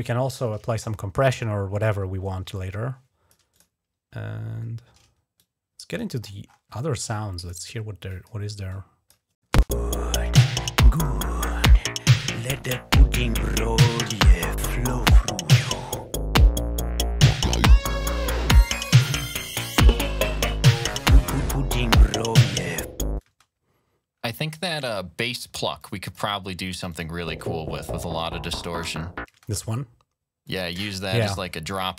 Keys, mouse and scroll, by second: 2.3 click, 3.3 click, 3.9-4.8 scroll down 4, 5.2 click, 6.1-6.7 scroll up 1, 7.2 click, 7.9 click, 8.5 click, 9.4 space, 10.7 click, 18.0 scroll down 2, 20.6-21.0 scroll down 2, 23.2 space, 24.0-24.4 scroll up 1, 24.7 ctrl+scroll down 2, 25.6 click, 26.7 click, 27.1 typing, 29.1 space, 29.3 click, 30.2 click, 31.0 ctrl+scroll up 2, 31.6 ctrl+scroll up 2.